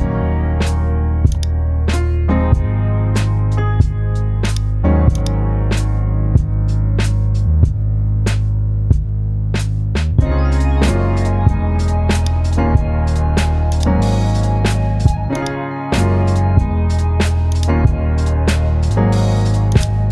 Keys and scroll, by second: 6.7 super+g, 8.4 super+j, 10.7 super+e.